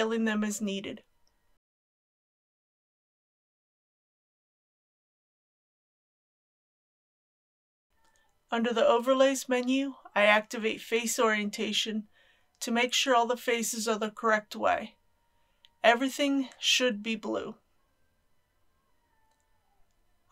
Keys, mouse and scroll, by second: 1.8 click, 2.0-3.0 typing, 2.8 click, 3.5 click, 3.6 right click, 4.2 click, 4.4-6.1 typing, 5.1 click, 5.7 shift+click, 7.6 click, 9.6-11.5 middle drag, 12.6 click, 13.5 middle click, 15.2 click, 16.2 middle click, 17.7 click.